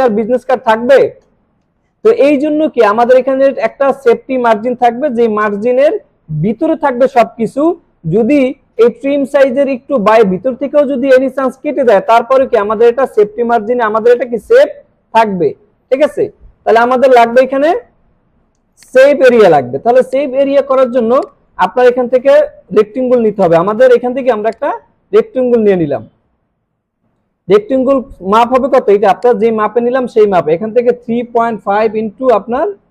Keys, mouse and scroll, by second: 16.7 right click, 17.3 click, 18.7 click, 20.0 space, 20.1-20.7 click, 20.5 space, 20.7 alt+scroll down 1, 21.1 space, 21.2 click, 24.7 click, 25.1-25.4 alt+scroll up 2, 26.3 alt+scroll down 1, 29.2 click.